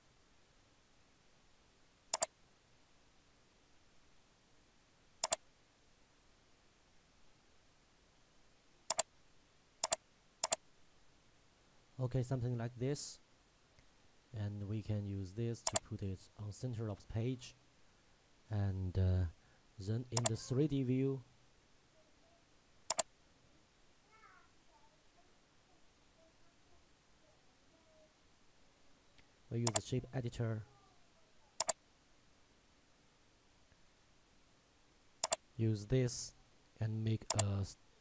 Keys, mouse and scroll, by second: 0.3-1.0 scroll down 1, 1.0-2.2 scroll up 1, 2.2 click, 5.3 shift+click, 15.8 click, 20.2 click, 22.9 click, 30.1 click, 35.5 click.